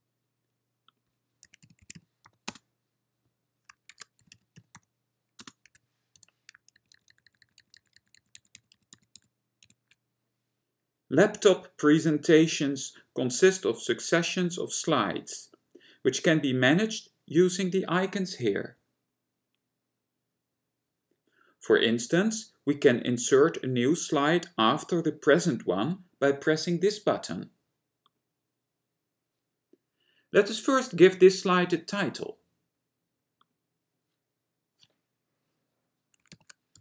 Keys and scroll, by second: 1.6-2.5 typing, 3.8-6.3 typing, 6.8 ctrl+d, 7.0 ctrl+d, 7.2 ctrl+d, 7.3 ctrl+d, 7.5 ctrl+d, 7.7 ctrl+d, 7.9 ctrl+d, 8.0 ctrl+d, 8.2-9.7 typing, 9.2 ctrl+d, 36.4-36.8 typing.